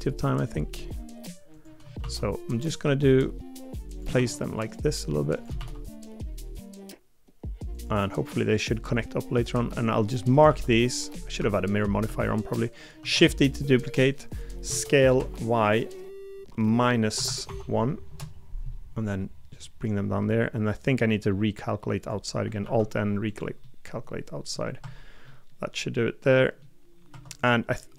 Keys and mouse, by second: 10.5 l, 12.0 click, 13.0 shift+d, 14.7 s, 22.6 alt+n, 23.6 middle click, 24.8 Tab, 25.2 middle click, 26.4 middle click, 27.1 Tab.